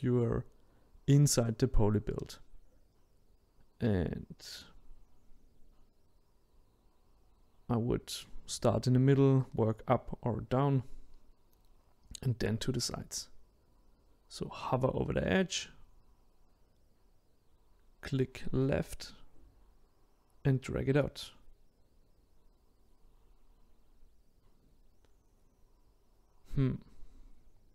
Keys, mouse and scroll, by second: 3.7-7.3 middle drag, 7.3 click, 8.1-9.6 shift+middle drag, 9.6-23.7 drag, 26.9-27.7 drag.